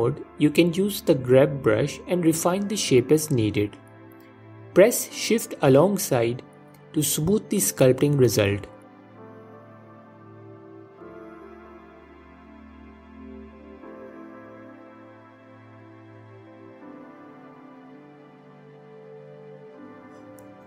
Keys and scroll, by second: 0.1 f, 9.8 ctrl+Tab, 13.1 ctrl+Tab, 16.2 ctrl+Tab, 18.7 s, 19.5 s, 20.4 s.